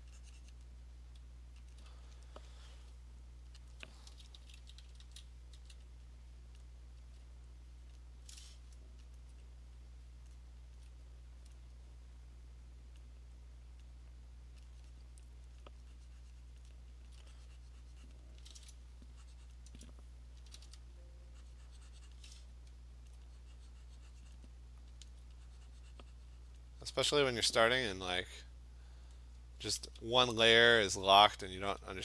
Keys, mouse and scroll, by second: 0.6 click, 1.7 alt+click, 3.7 alt+click, 4.4-5.7 typing, 6.6 click, 7.0 [, 7.9 click, 9.2 alt+click, 10.3 click, 10.8 alt+click, 11.5 click, 13.0 click, 13.8 click, 13.9 alt+click, 15.6 click, 16.6 click, 17.1 alt+click, 18.2 alt+click, 19.5 click, 19.7 Return, 20.5 ], 20.7 ], 22.2 click, 23.1 alt+click, 24.4 click, 25.1 alt+click, 26.6 click, 27.5 click, 27.9 click, 28.1 alt+click, 28.9 click, 29.1 click, 30.9 alt+click, 31.8 alt+click.